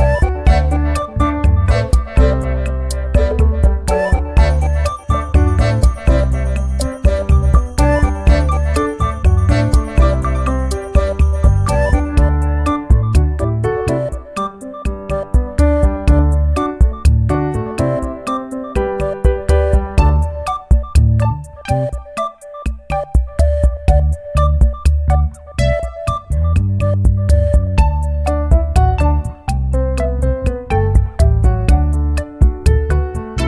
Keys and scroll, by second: 3.1 ctrl+j, 13.4 ctrl+g.